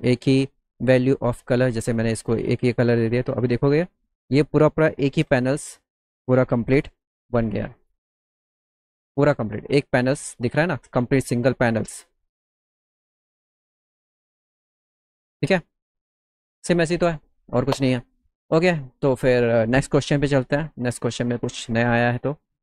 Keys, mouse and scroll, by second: 1.3 click, 2.3 click, 3.1 click, 7.4 middle click, 7.8-8.3 scroll up 3, 8.6 scroll down 1, 8.7 middle click, 9.0 middle click, 9.3 middle click, 11.2 click, 12.5 middle click, 12.9 middle click, 13.0 middle click.